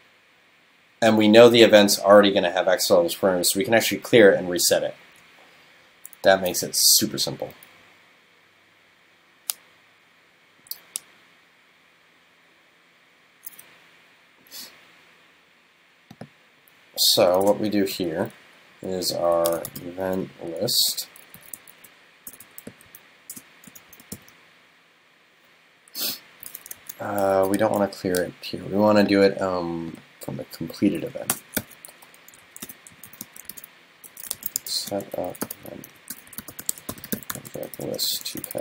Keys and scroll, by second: 27.4 super+x, 31.6 super+v, 32.7 super+Right.